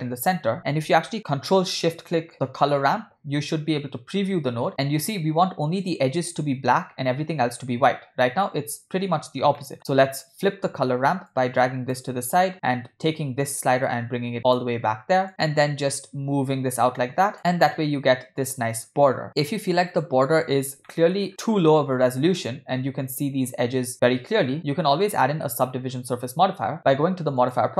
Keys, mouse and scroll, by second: 1.1 ctrl+shift+z, 2.3 ctrl+shift+click, 9.6 middle click, 11.3 click, 13.1-14.6 drag, 15.3-17.7 drag, 20.1 scroll up 1, 20.3-20.6 scroll down 1, 20.9 shift+middle drag, 21.3 scroll up 3, 21.9-22.4 scroll down 1, 22.5-24.2 scroll down 2, 24.3-24.8 scroll down 2, 24.4-24.8 scroll up 1, 24.9-25.2 scroll down 2, 25.5 shift+middle click, 27.4 click.